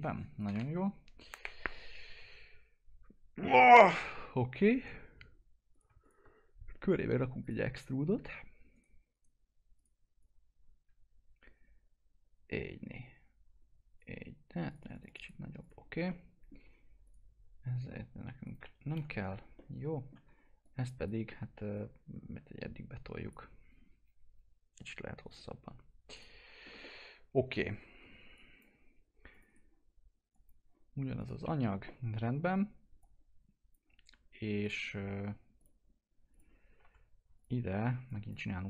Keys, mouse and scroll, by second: 5.7 click, 7.4 click, 8.7 right click, 9.8-14.7 drag, 14.7 click, 16.4 alt+middle click, 17.0 click, 18.9 Delete, 19.5 alt+middle click, 20.2 1, 20.6 click, 21.2 w, 21.7-24.8 drag, 24.8 click, 26.8-28.3 alt+middle drag, 28.3 click, 29.4 right click, 30.3 click, 31.4 F4, 33.0-34.6 drag, 36.8 F4, 37.0-37.3 scroll up 1, 37.3 click.